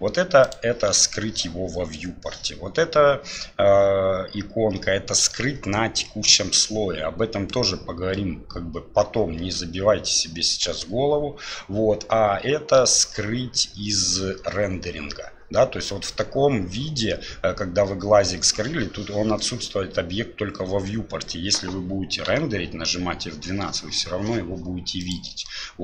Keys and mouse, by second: 25.2 F12.